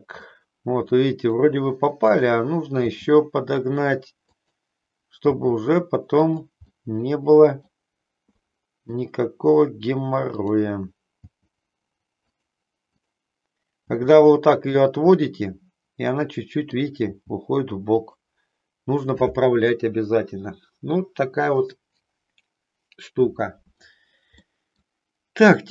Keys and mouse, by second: 1.0 middle click, 2.0 click, 2.9 g, 4.3 click, 5.2 g, 6.3 click, 6.8 middle click, 8.4 middle click, 10.3 click, 11.3 g, 12.4 click, 12.9 click, 13.8 g, 14.8 click, 15.2-16.9 middle drag, 17.0 g, 18.0 click, 24.5 middle click.